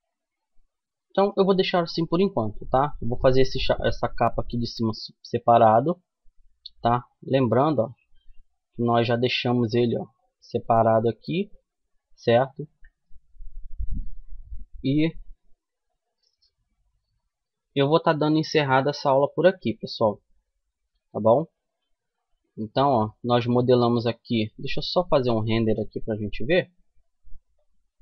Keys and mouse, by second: 0.7-3.0 middle drag, 1.8 Tab, 6.8-8.4 drag, 8.4-17.3 middle drag, 19.0-20.8 drag, 20.8 middle click, 22.3 middle click, 25.7-27.5 right drag, 26.7-28.0 drag.